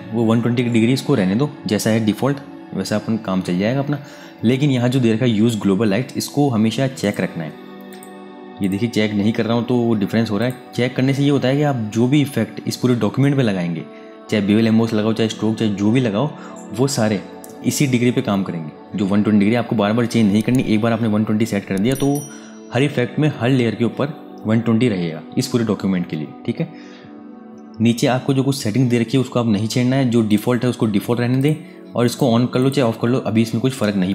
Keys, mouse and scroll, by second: 6.7 click, 30.0 click.